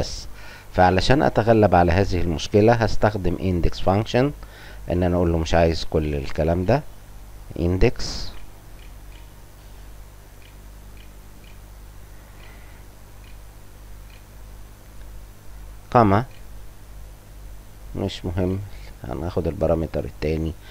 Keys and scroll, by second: 3.2 8, 3.7 i, 4.8-9.0 typing, 10.3 n, 11.3 e, 11.8 c, 14.0 shift+9, 16.2 ,, 18.4 ,.